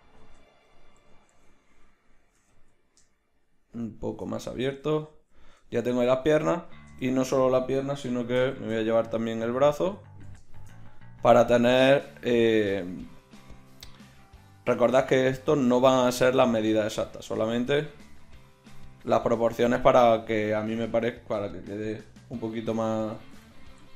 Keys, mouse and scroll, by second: 0.2 Tab, 1.0 a, 1.3 a, 2.3 g, 4.4 z, 8.5 shift+d, 13.1-14.9 drag, 17.8-21.2 drag, 21.2 middle click, 22.7 middle click.